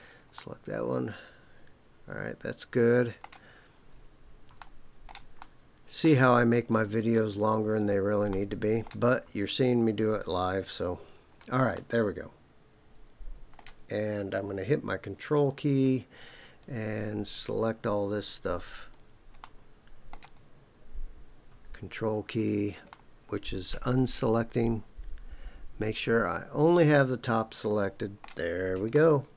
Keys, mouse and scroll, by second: 0.3-3.3 middle drag, 3.5-4.4 scroll down 4, 4.6 shift+middle click, 5.4 middle click, 6.5-7.4 scroll up 5, 7.4 scroll down 2, 7.7 scroll up 1, 8.3 middle click, 10.2 shift+click, 10.9-11.5 scroll down 4, 11.7-13.6 middle drag, 15.5 ctrl+click, 16.6 ctrl+click, 18.2 ctrl+click, 19.4 middle click, 21.9 ctrl+click, 22.9-28.2 middle drag, 28.9 shift+middle click.